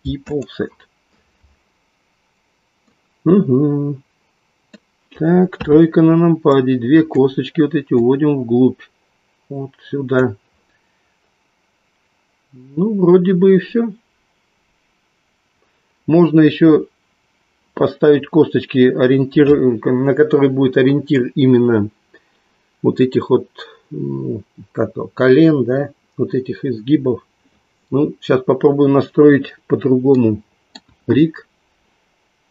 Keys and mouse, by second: 2.9-5.0 middle drag, 5.7 KP_3, 6.5 click, 9.0-10.2 drag, 30.1-31.1 middle drag, 30.9 KP_1.